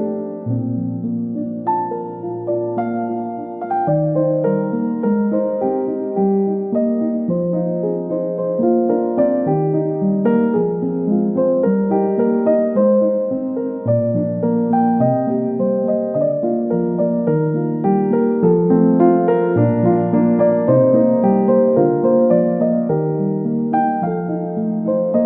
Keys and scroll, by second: 0.0 Up, 0.5 Left, 3.9 ctrl+c, 4.0 ctrl+v, 9.3 ctrl+c, 11.8 Delete.